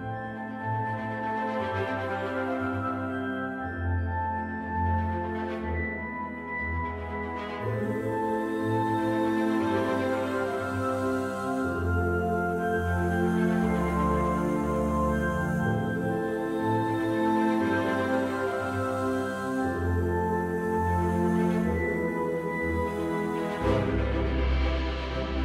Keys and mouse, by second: 0.5-5.1 right drag, 6.2-8.7 right drag, 9.8-18.2 right drag, 22.3-25.4 right drag.